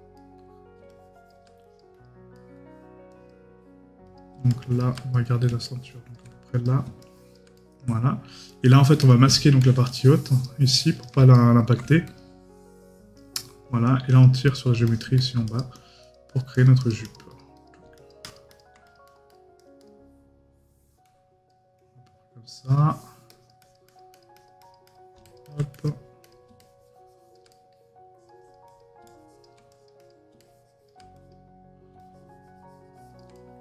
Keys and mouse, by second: 0.2 right click, 2.3 right click, 7.6 right click, 11.3 right click, 27.5 right click, 33.3 right click.